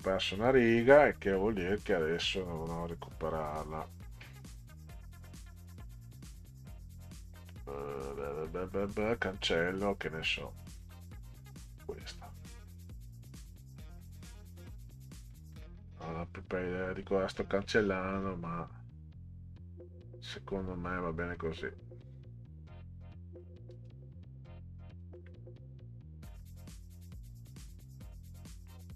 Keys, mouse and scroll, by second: 0.7 click, 1.9 click, 2.1 click, 6.1-7.5 middle drag, 10.8 click, 11.6 click, 13.3-15.3 drag, 15.5 Delete, 15.5-16.0 scroll down 1, 17.4 middle click, 17.5-17.9 scroll up 1, 18.4 scroll down 1, 23.4-25.0 drag, 25.1 Delete, 26.3 Delete.